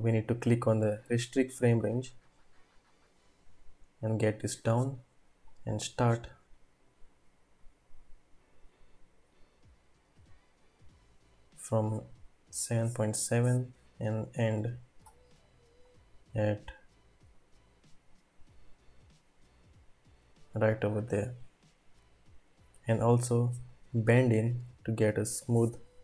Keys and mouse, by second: 1.1 click, 4.2 click, 5.4-12.0 drag, 13.5-15.0 drag, 15.9-20.6 drag, 23.8-26.0 drag.